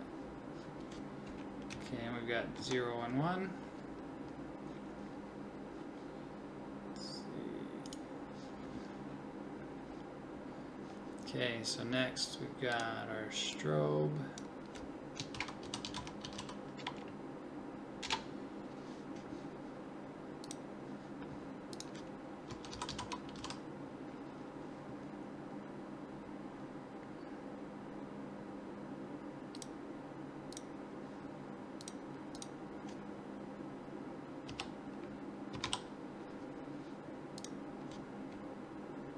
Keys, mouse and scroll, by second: 1.7 Right, 2.6 Left, 6.1-7.9 drag, 12.7-18.1 drag, 20.4-30.5 drag.